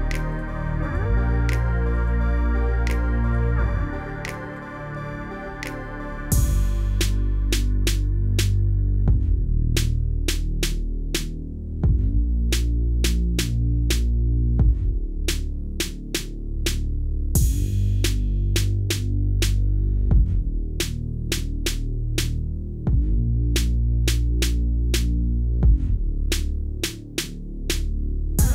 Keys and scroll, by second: 4.5 ctrl+s.